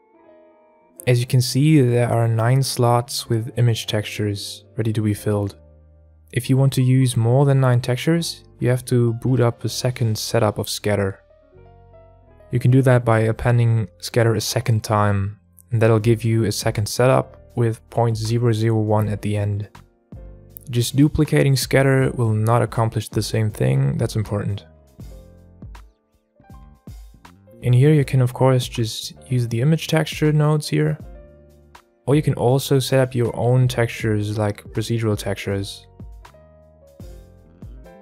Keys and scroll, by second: 11.4 Tab, 24.0 Tab, 33.3 shift+Tab, 33.8 shift+a.